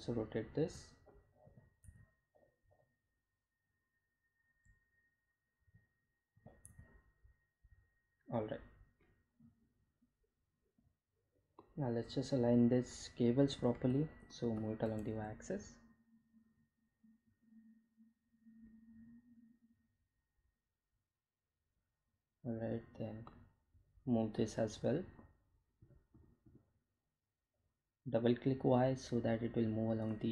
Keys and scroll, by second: 3.5 r, 3.9 z, 8.9 r, 9.3 z, 16.8 g, 18.0 y.